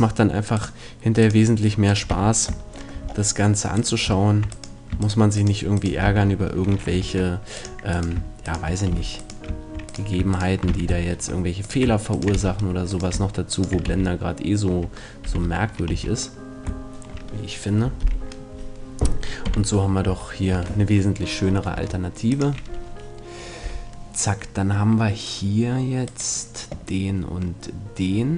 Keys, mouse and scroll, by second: 0.6-2.6 right drag, 2.1 f, 2.7 right click, 3.6 middle click, 3.8 right click, 6.0 f, 7.0 ctrl+Tab, 8.9 f, 10.7 f, 12.4 f, 13.9 f, 15.3 z, 15.9 a, 19.5 z, 20.1 Tab, 20.6 Tab, 21.8 ctrl+Tab, 26.0-28.0 right drag.